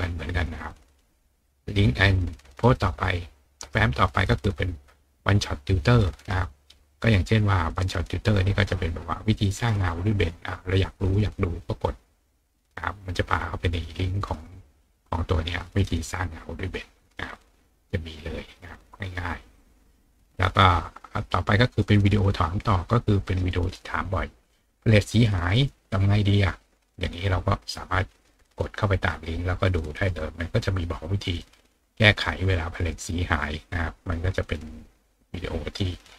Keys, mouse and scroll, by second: 1.4 click, 10.8 click, 19.6 click, 21.8 click, 28.5 click, 33.4-33.8 scroll down 2.